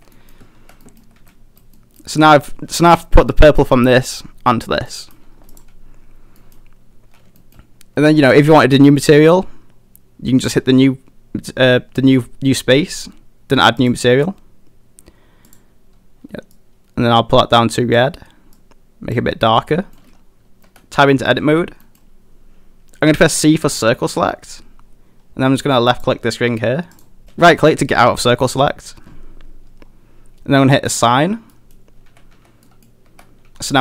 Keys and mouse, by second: 0.1 middle click, 0.6 Tab, 0.8 middle drag, 1.2 a, 1.3-1.6 middle drag, 1.8 middle drag, 4.9 middle drag, 5.5 click, 6.4 middle drag, 7.4 shift+middle click, 13.8 click, 19.7 middle drag, 20.6 Tab, 21.1 middle click, 21.8 middle click, 23.6 c, 27.0 click, 27.2 shift+middle click, 31.0 click, 31.6 middle click, 32.1 a, 32.3 a, 32.7 middle click, 33.1 Tab, 33.5 a, 33.6 a, 33.7 middle drag.